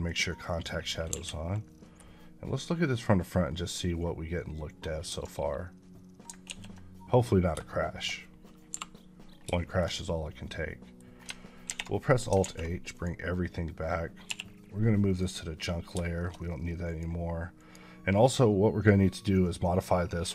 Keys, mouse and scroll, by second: 0.3 middle click, 1.0 KP_1, 6.3 ctrl+s, 7.6-8.6 shift+middle drag, 8.6 KP_5, 9.5 shift+middle click, 11.0 scroll up 1, 11.5 alt+h, 12.5 a, 12.8 click, 14.1 m, 15.0 click, 15.9 shift+middle click, 16.7 click.